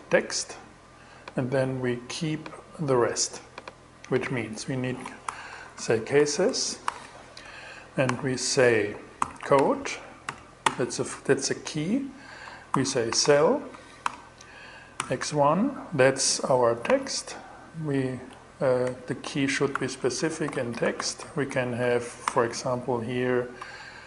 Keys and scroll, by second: 4.5-5.6 typing, 5.9 alt+s, 6.9 alt+d, 7.5-9.7 typing, 11.9-13.1 typing, 13.2 alt+l, 13.5 alt+5, 14.4 alt+x, 14.7 i, 16.3 shift+-, 18.3-21.3 typing, 21.7 alt+shift+7, 23.6-24.0 typing.